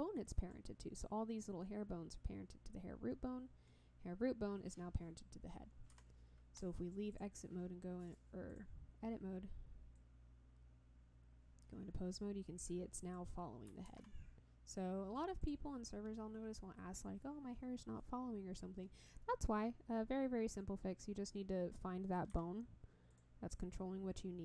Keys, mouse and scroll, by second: 6.1 Tab, 6.5 click, 7.1 drag, 8.0 click, 9.1 click, 9.9-13.3 drag, 14.1 ctrl+z, 15.4 click, 22.5 Tab, 23.1 click.